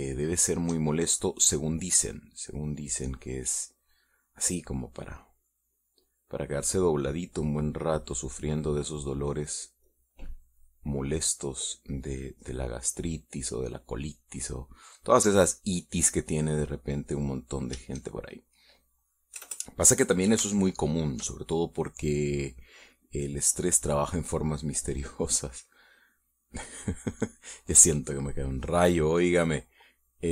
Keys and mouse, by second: 1.0-2.3 shift+middle drag, 2.7 middle click, 6.2-7.3 drag, 7.6 click, 8.3 click, 9.0 middle click, 10.7 click, 11.4 click, 12.9-14.6 drag, 14.9-15.9 middle drag, 16.0 middle click, 17.1-18.4 drag, 20.2 KP_Add, 21.4 shift+middle click, 22.4 shift+middle click, 24.2-26.3 drag, 26.8 click, 30.1-30.3 drag.